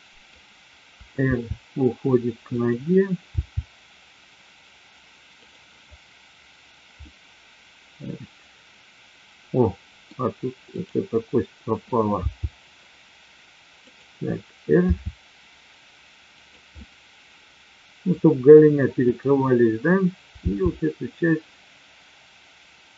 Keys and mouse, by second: 1.3 r, 3.4 g, 5.4 click, 7.0-10.0 middle drag, 10.7-11.7 drag, 12.1 g, 14.9 r, 16.4 click, 16.6-18.1 middle drag, 19.1-19.9 drag, 20.5 g.